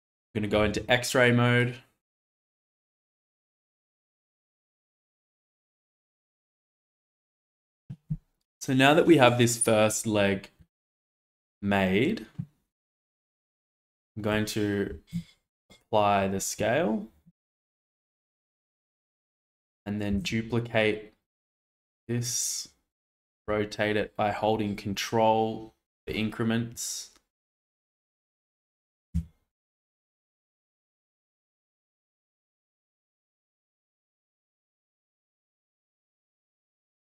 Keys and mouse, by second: 0.6 alt+z, 1.2 click, 2.1 g, 2.3 z, 3.2-4.4 drag, 4.4 Tab, 5.8 click, 6.6 shift+middle click, 10.7-11.0 shift+middle drag, 14.8 shift+a, 17.1 ctrl+a, 18.5 shift+middle click, 20.0 shift+d, 23.2 r, 29.0 g, 32.2-32.8 shift+middle drag, 33.6 click, 34.9-35.5 shift+middle drag, 36.0 shift+middle click, 36.8 Tab.